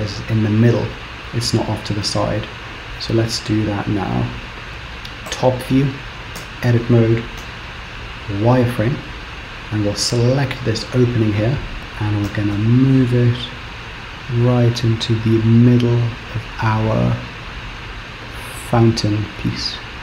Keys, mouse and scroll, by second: 4.7 Tab, 4.7 middle click, 5.3 KP_7, 6.5 Tab, 7.4 z, 8.8-9.4 scroll up 1, 9.5 click, 11.6 scroll up 2, 11.8 shift+middle click, 11.8 KP_7, 12.3 g.